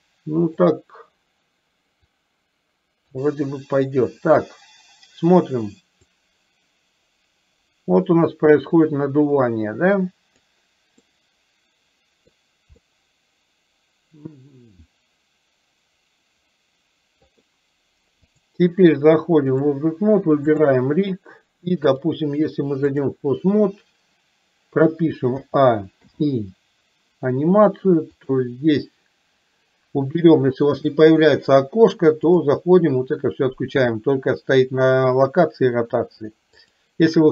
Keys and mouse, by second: 2.2-3.2 drag, 6.3-10.4 drag, 11.2-12.4 middle drag, 12.9-17.4 middle drag, 18.4-19.8 drag, 20.7 click, 22.1-23.2 drag, 25.6 a, 26.2 i, 28.9-30.6 drag, 32.4-37.1 drag.